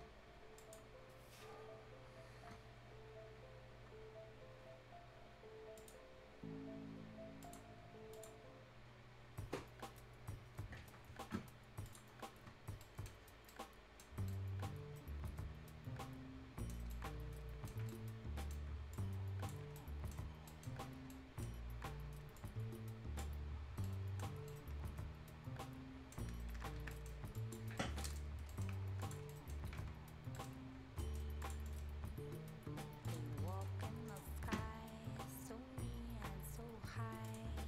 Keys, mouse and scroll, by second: 5.8 click, 5.8 click, 11.9 click, 12.8 right click, 12.8-13.2 scroll down 2, 12.8 right click, 13.3 scroll up 1, 13.5 right click, 14.0 scroll down 1, 14.3-16.9 right drag, 16.9-18.9 right drag, 18.9 ctrl+click, 19.8 right click, 20.2 scroll up 1, 20.5 right click, 20.8-21.1 scroll up 1, 21.1 right click, 21.5 scroll down 1, 22.4 click, 23.4-23.7 scroll down 1, 23.8 right click, 24.2 scroll down 1, 24.5-26.3 right drag, 26.3-26.6 scroll up 2, 26.4 Escape, 26.6 Escape, 26.8 scroll down 1, 26.9 right click, 27.1 scroll up 1, 27.6 scroll down 1, 27.8 right click, 28.3 Delete, 28.5 right click, 28.7 scroll down 1, 28.8 scroll up 1, 29.0 click, 29.1 click, 29.3 right click, 29.6 scroll up 1, 30.3 right click, 30.6 scroll down 1, 31.0 right click, 31.4 click, 31.6 scroll up 1, 33.0 click, 33.3 scroll up 1, 33.5 right click, 33.7 scroll down 1, 33.9 scroll up 1, 34.1 click, 34.1 click, 37.2 click, 37.5 scroll up 1.